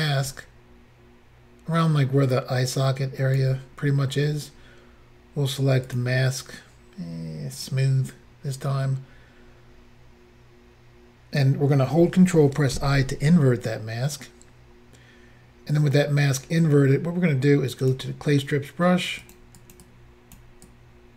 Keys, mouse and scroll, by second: 5.9 click, 6.0 click, 7.5 click, 7.6 click, 12.7 ctrl+i, 17.8 click, 17.9 click, 19.2 click, 19.6 click, 19.7 click, 19.8 click, 20.7 click.